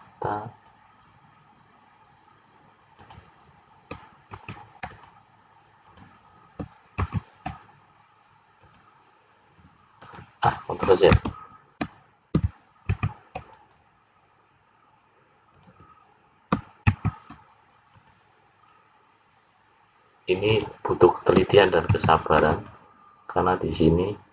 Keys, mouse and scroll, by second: 4.3 ctrl+r, 7.0 ctrl+r, 11.3 ctrl+z, 12.9 ctrl+r, 16.9 ctrl+r, 21.9 ctrl+r.